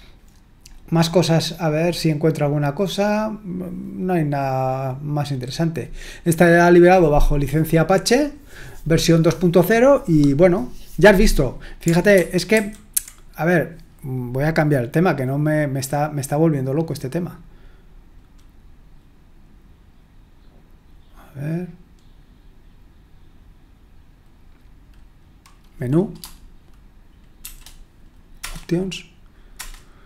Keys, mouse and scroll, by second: 12.1 super+1, 12.5 super+2, 27.4 m, 28.4 Return, 29.5 Return.